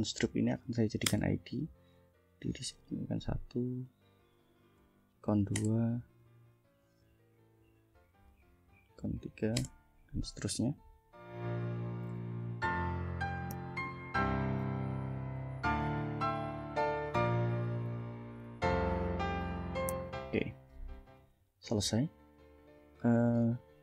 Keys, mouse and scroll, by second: 1.1 Return, 2.8 click, 3.9 ctrl+click, 4.5 ctrl+v, 5.3 2, 5.5 Return, 6.9 click, 7.9 click, 8.8 ctrl+v, 9.3 ctrl+3, 9.6 ctrl+Return, 10.7 click, 11.5 click, 11.8 ctrl+v, 11.8 ctrl+4, 12.1 Return, 12.4 click, 12.7 ctrl+click, 13.1 ctrl+v, 13.5 5, 13.7 Return, 13.9 click, 14.2 click, 14.4 ctrl+v, 14.5 ctrl+6, 15.0 click, 15.5 ctrl+v, 15.7 ctrl+7, 15.9 ctrl+Return, 16.2 click, 16.5 click, 16.7 ctrl+v, 17.0 8, 17.2 Return, 17.5 click, 17.9 click, 18.2 9, 18.8 click, 19.3 click, 19.5 ctrl+v, 19.6 ctrl+1, 19.7 ctrl+0, 20.0 Return, 21.0 ctrl+s, 21.7 ctrl+scroll down 3, 23.0 scroll up 2.